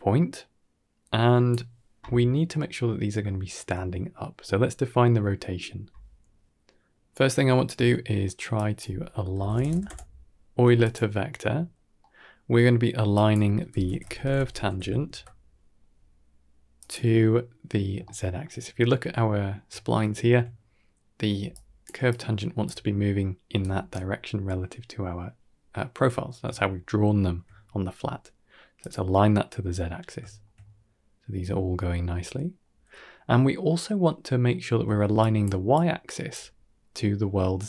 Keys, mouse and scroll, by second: 2.4 middle drag, 3.1 shift+middle drag, 4.5-4.9 scroll up 3, 4.9-5.2 middle drag, 5.6 middle drag, 6.8 middle click, 8.4-10.8 drag, 11.9 middle click, 13.0-16.7 drag, 17.9-18.3 shift+middle drag, 18.5 middle click, 18.8 scroll up 3, 19.1-19.4 shift+middle drag, 19.9 shift+middle click, 21.3 d, 21.4 click, 21.8 d, 21.8 d, 21.9 click, 21.9 d, 23.4 d, 23.5-24.4 right drag, 26.1 scroll down 2, 26.5 shift+middle drag, 27.0 shift+middle click, 27.8-28.7 scroll up 3, 28.7 click, 30.1 shift+middle drag, 30.5-31.2 middle drag, 32.5-33.1 middle drag, 33.1 middle drag, 33.4 shift+middle drag, 33.9 d, 34.4 d, 34.5 click, 34.9 d, 34.9 d, 35.0 click, 37.1 d, 37.3 middle click, 37.5 right click, 37.5 middle click.